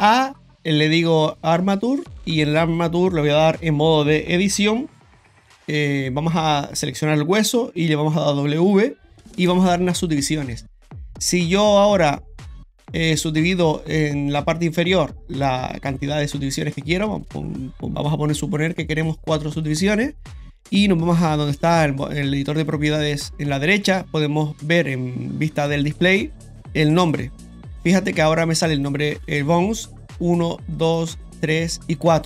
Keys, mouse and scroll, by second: 4.9 Tab, 6.7 right click, 8.1 w, 18.7 click, 19.6 click, 22.5 click, 25.6 click, 27.0 click, 28.7 right click, 30.2 right click, 30.8 right click, 31.3 right click, 32.0 right click.